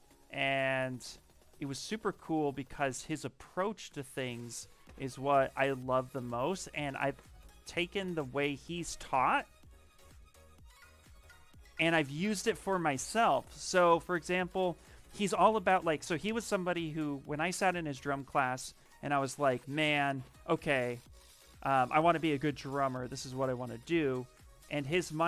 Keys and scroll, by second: 11.3 ctrl+v, 11.7 Return, 20.5 w, 22.7 q, 24.6 shift+f.